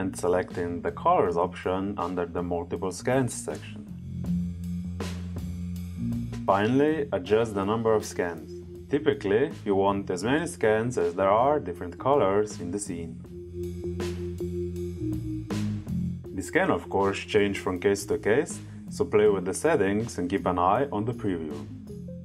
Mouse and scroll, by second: 4.8 click, 11.9 click, 12.6 click, 13.3 click, 14.0 click, 14.8 click, 15.6 click, 19.3 click.